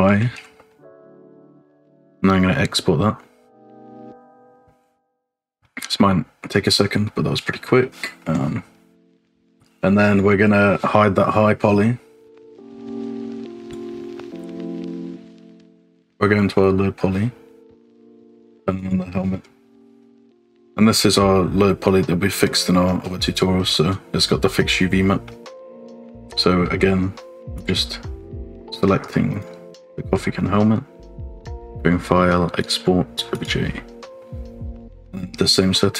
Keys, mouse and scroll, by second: 5.0-5.5 scroll up 1, 5.6 shift+middle click, 7.0 middle click, 7.6 middle click, 9.2 click, 10.1 click, 13.7 click, 14.7 click, 16.9-17.8 scroll down 1, 17.9 click, 18.8 click, 19.4-19.8 scroll up 1, 19.8 middle click, 21.3-22.7 middle drag, 23.2 middle click, 25.2 middle click, 25.9 scroll down 1, 26.1 middle click, 26.7 shift+middle click, 27.5 click, 28.3-29.6 drag, 30.2 shift+middle click, 31.5-33.5 drag.